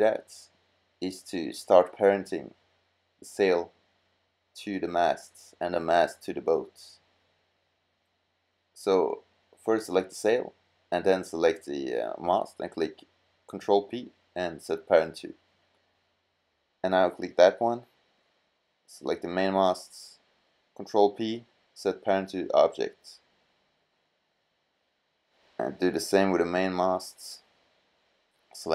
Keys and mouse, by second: 2.3-3.8 drag, 6.1 middle drag, 11.6 ctrl+p, 20.6 ctrl+p.